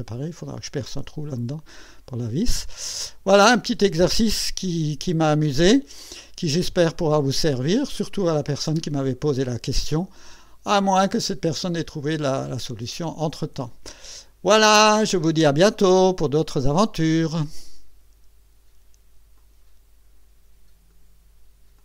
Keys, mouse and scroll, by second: 1.3-2.1 drag, 2.9 click, 7.5 click, 8.8-15.3 drag, 17.4 right click, 19.5 click.